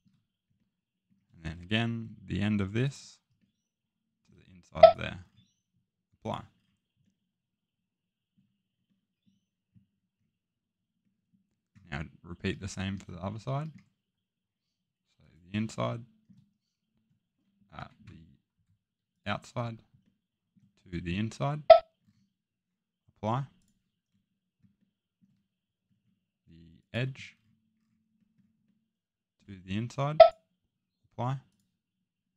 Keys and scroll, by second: 17.7 Escape.